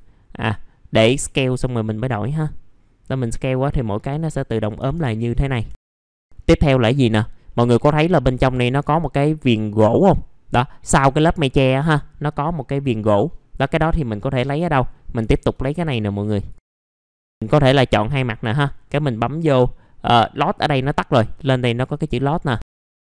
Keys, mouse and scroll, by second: 1.2-4.8 drag, 4.8 1, 5.5 F4, 5.8 alt+middle click, 6.0 scroll down 1, 6.2 middle click, 6.4-6.8 scroll up 1, 6.8 middle click, 7.2 scroll up 1, 7.5 middle click, 11.5 scroll down 1, 11.8 middle click, 13.3 scroll up 1, 13.6 alt+middle click, 14.1 scroll up 1, 14.4 click, 14.9 middle click, 15.2 F4, 15.5 right click, 16.4 click, 16.6 middle click, 16.7 scroll up 4, 17.0 click, 17.9 ctrl+click, 22.6 middle click, 22.7 alt+middle click.